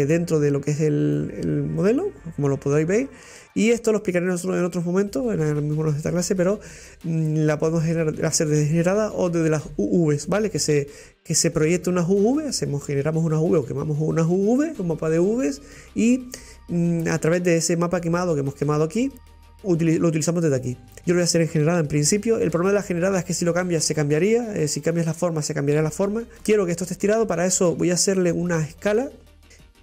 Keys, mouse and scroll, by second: 0.0-26.3 drag, 26.3 scroll down 3, 29.3-29.8 drag.